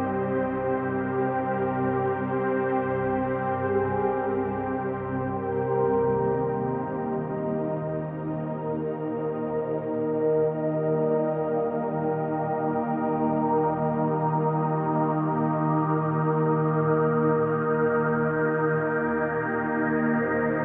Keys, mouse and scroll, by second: 0.8 alt+z, 2.2 1, 2.5 click, 3.1 click, 4.5-5.3 drag, 6.4 s, 6.9 x, 8.1 click, 8.5-9.4 middle drag, 9.7-10.7 scroll up 2, 10.7 click, 10.7 scroll up 1, 12.3 2, 12.6 click, 13.2 alt+click, 14.5 alt+shift+click, 15.4-16.5 middle drag, 17.2 shift+click, 17.7-19.0 middle drag, 20.3 click.